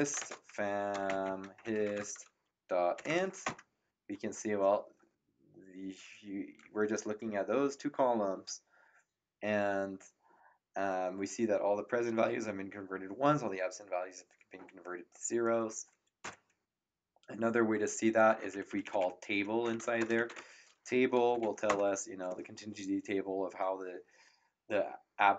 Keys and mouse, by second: 0.0-3.6 typing, 16.2 Up, 18.5 ctrl+Left, 19.8-21.9 typing.